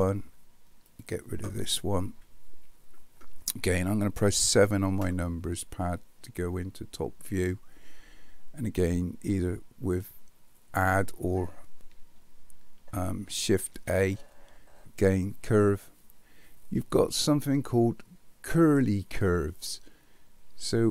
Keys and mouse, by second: 1.0 click, 2.1 Delete, 4.4 KP_7, 13.7 shift+a.